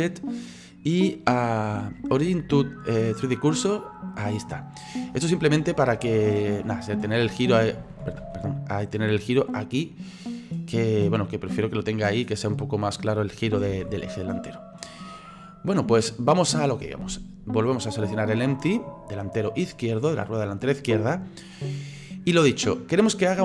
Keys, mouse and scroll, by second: 5.5-7.2 middle drag, 7.2 click, 8.2 ctrl+z, 9.0-13.7 drag, 13.7 ctrl+z, 14.0-14.4 scroll down 3, 14.4-17.8 middle drag, 17.8 right click.